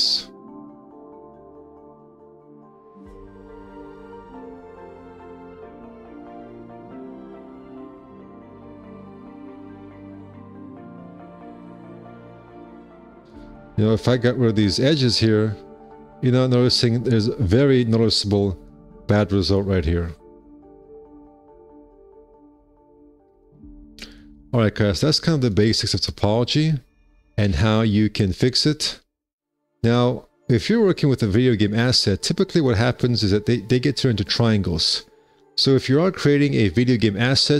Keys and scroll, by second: 3.1 2, 4.3 space, 5.5 space, 6.1 F4, 9.8 ctrl+r, 10.2 1, 11.1 alt+c, 13.4 2, 14.7 ctrl+r, 15.3 space, 15.8 F4, 17.0 2, 20.2 F4, 23.6 F4, 25.0 alt+q, 31.9 w.